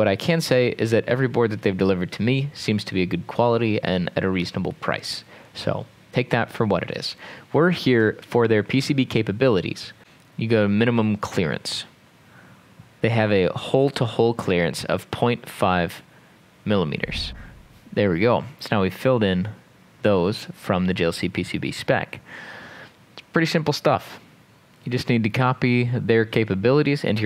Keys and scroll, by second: 17.3-18.1 typing.